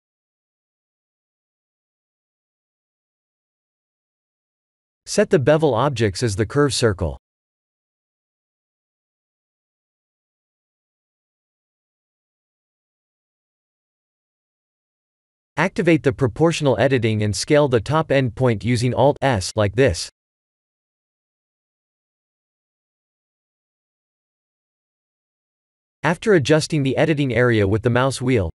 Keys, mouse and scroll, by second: 0.5 Tab, 0.9 click, 2.5 click, 4.1 click, 4.5-5.8 scroll down 5, 5.8 click, 7.3 scroll down 2, 7.8 shift+middle click, 8.4-8.7 scroll up 5, 9.0 middle click, 10.1 middle click, 11.5 shift+middle click, 11.6 shift+middle click, 12.9 Tab, 13.7 click, 14.2 middle click, 15.8 alt+s, 17.7 ctrl+z, 18.6 o, 20.4 alt+s.